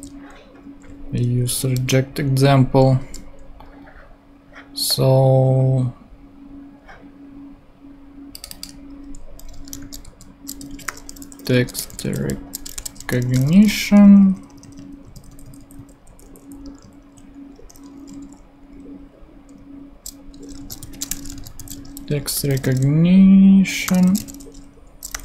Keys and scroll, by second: 0.9 shift+super+Tab, 1.5 shift+super+Left, 1.8 shift+super+v, 2.7 super+v, 3.0 BackSpace, 9.7-14.0 typing, 14.2 Right, 15.0 alt+Right, 20.3-25.2 typing.